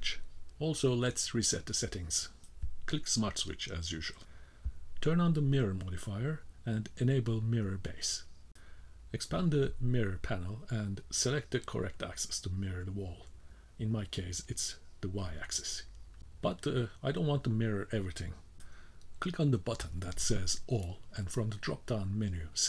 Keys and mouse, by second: 0.2 k, 1.3-2.3 drag, 14.4-21.1 drag, 22.5-22.6 middle drag.